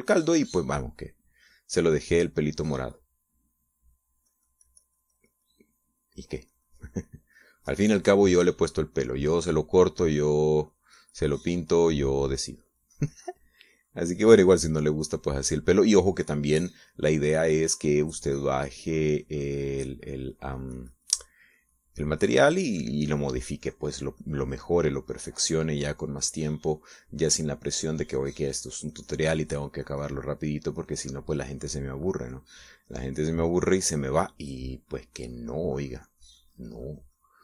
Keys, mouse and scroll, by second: 0.8 shift+middle click, 2.0-3.9 middle drag, 5.1-10.0 drag, 11.2-20.0 drag.